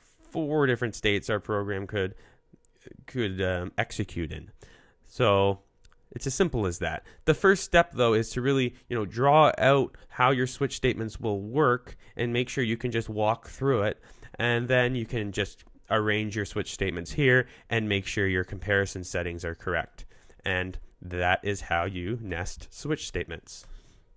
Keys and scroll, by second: 20.5 BackSpace, 22.3 BackSpace, 23.7 BackSpace.